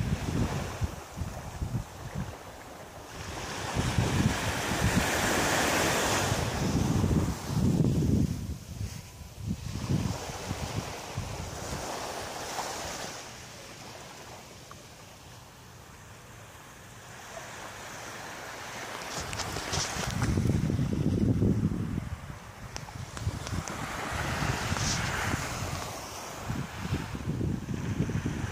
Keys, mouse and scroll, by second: 0.3 shift+right click, 1.7 click, 2.3 click, 2.8 middle click, 4.2 middle click, 5.4 g, 6.9 click, 8.1 l, 10.1 l, 10.9 shift+middle click, 12.1 g, 13.3 click, 13.5 middle click, 14.8 scroll down 3, 15.3 middle click, 16.3-17.2 scroll up 7, 17.5 right click, 18.3 l, 18.8 middle click, 19.7-20.1 scroll down 2, 20.4 right click, 21.3 right click, 21.7 alt+right click, 22.6 shift+right click, 23.0 alt+right click, 23.3 shift+right click, 23.7 shift+right click, 24.0 shift+right click, 24.9 shift+right click, 24.9 x, 26.0 middle click, 26.5-27.0 scroll down 5, 26.6 x, 27.5 middle click.